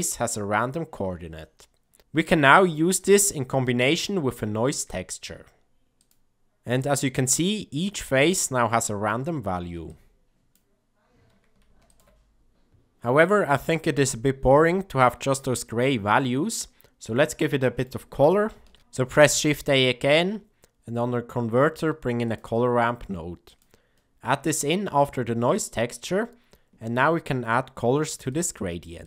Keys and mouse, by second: 2.9 shift+a, 8.6 click, 9.8-10.4 drag, 11.8 ctrl+shift+click, 16.1 middle click, 17.3 middle click, 18.7 shift+a, 24.0 middle click, 25.5 middle click, 28.2 click, 28.9 click.